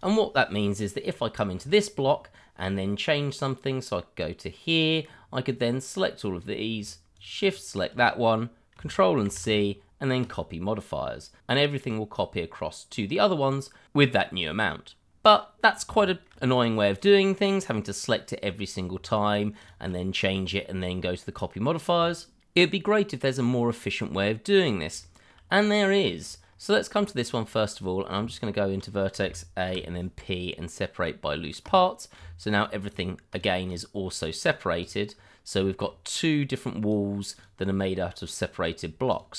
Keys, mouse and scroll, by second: 1.3 scroll up 1, 1.6 shift+middle click, 2.0-3.4 scroll up 1, 3.4 click, 5.1-5.6 scroll down 1, 5.6 click, 7.1 shift+click, 7.5 click, 9.3 ctrl+c, 10.2 click, 11.6 scroll down 1, 12.2-12.9 scroll up 1, 12.9 click, 13.2 scroll down 1, 13.4 scroll up 1, 14.9-15.6 scroll down 1, 16.0 shift+middle click, 17.0 click, 19.0 shift+click, 19.1 click, 25.0 shift+middle click, 26.1 middle click, 26.6-26.9 scroll up 1, 27.0 shift+middle click, 27.1 middle click, 27.2 shift+middle click, 27.3-28.1 scroll up 1, 28.1 Tab, 29.2 a, 29.7 p, 31.6 click, 32.2 Tab, 32.9 click, 33.4 double click, 34.1 scroll down 1, 34.4 click, 34.9 double click, 35.1-35.5 scroll down 1, 35.7 middle click, 35.8 shift+middle click, 36.3 click, 37.7 double click, 37.9 click.